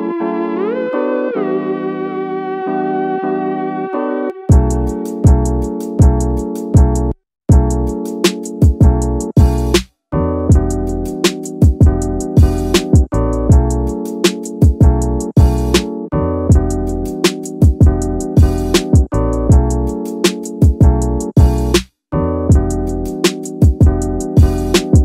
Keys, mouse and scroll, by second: 0.3 x, 0.5 x, 2.2 y, 2.4 y, 4.2 z, 4.4 z, 6.9 right click, 7.7-8.5 scroll up 2, 8.5 Tab, 8.9-9.8 scroll down 2, 10.1 s, 11.3-13.7 drag, 15.2 Tab, 15.7-16.5 scroll up 2, 16.5 click, 16.7 click, 17.9 click, 19.3 alt+click, 19.5 alt+click, 21.1 alt+click, 21.7-22.1 scroll up 2, 22.5-23.9 drag, 24.7 shift+middle click.